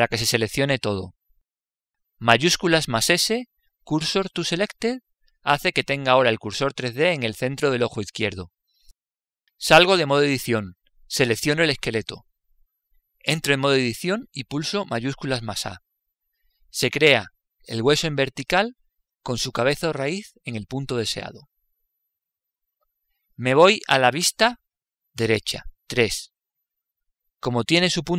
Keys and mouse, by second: 0.4 l, 3.8 shift+s, 10.8 Tab, 13.7 right click, 14.7 Tab, 16.7 shift+a, 24.7 KP_3, 25.6-28.1 middle drag.